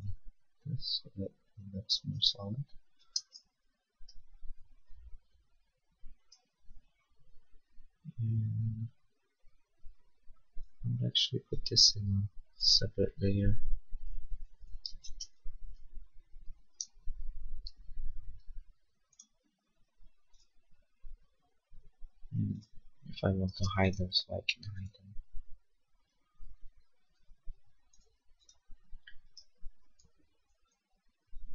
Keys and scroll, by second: 3.0 space, 17.6 Return, 23.6 space, 30.6 ctrl+s.